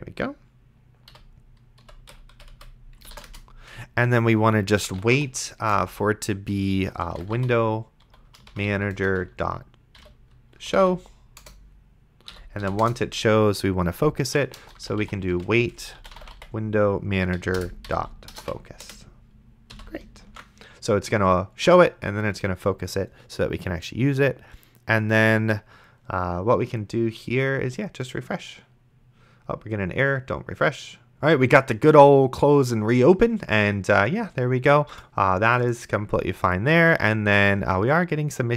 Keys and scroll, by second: 1.1 End, 1.8 ;, 2.3 Left, 3.0 space, 3.3 Return, 4.5-8.8 typing, 5.7 Return, 9.0 Return, 10.0-11.6 typing, 12.3 End, 12.6 ;, 12.8 Return, 14.2-19.7 typing, 17.4 Down, 17.6 Return, 20.5 ctrl+s.